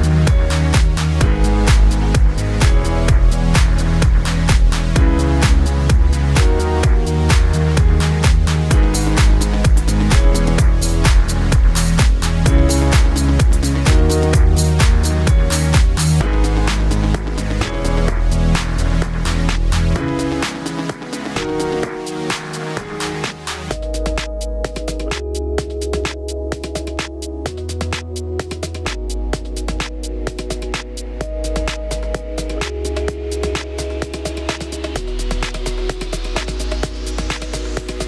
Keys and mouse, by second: 6.1 click, 6.5 shift+middle click, 6.6 shift+d, 7.4-29.8 drag, 9.8 Tab, 9.9 a, 10.4 x, 11.1 shift+a, 29.3 s, 29.8-33.0 middle drag, 29.9 s, 32.1 s, 33.0-36.2 drag, 35.4 s, 36.2 middle click, 36.5-38.0 drag.